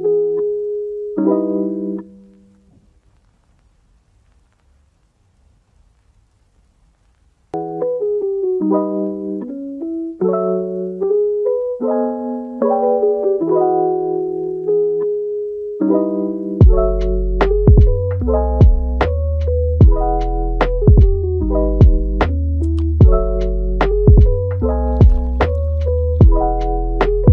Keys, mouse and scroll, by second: 0.1-0.6 middle drag, 0.6 g, 1.6 Tab, 2.3 g, 4.8 g, 8.3 click, 8.7 g, 11.4-12.5 middle drag, 12.5 a, 13.8 ctrl+t, 15.0-17.3 middle drag, 17.3 ctrl+t, 25.1-26.9 middle drag, 26.9 click, 27.1 g.